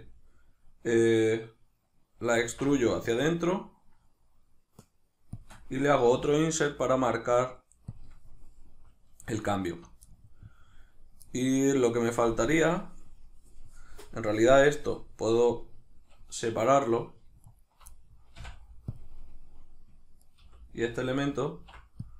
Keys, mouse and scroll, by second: 2.5 alt+e, 5.5-6.2 shift+drag, 6.2-8.0 middle drag, 8.0 shift+click, 9.6 alt+right click, 10.1-17.5 middle drag, 17.5 alt+right click, 17.9-20.2 middle drag, 18.4 x, 20.2 right click, 20.4 l, 21.6 alt+e.